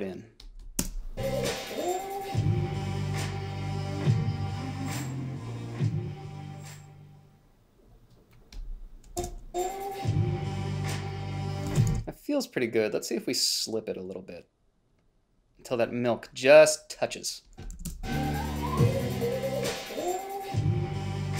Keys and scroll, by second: 1.1 space, 9.6 space, 12.1 space, 18.1 a, 18.2 space.